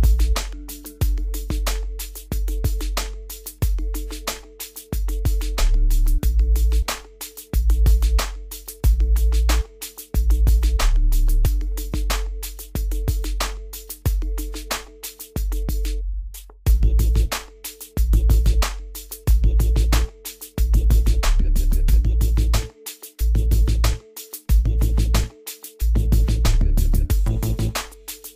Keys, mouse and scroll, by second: 0.3-0.8 scroll down 1, 0.8 middle click, 0.9 middle click, 1.6 scroll up 1, 3.1-4.5 middle drag, 4.5-4.8 scroll down 1, 4.8-5.4 scroll up 1, 5.4-9.5 middle drag, 9.5-11.2 middle drag, 11.2 scroll up 1, 11.9 click, 13.9 right click, 14.4 click, 14.9-15.7 scroll up 1, 15.7-16.2 scroll down 1, 16.2 click, 19.2-19.8 scroll down 1, 20.4 click, 27.0 click.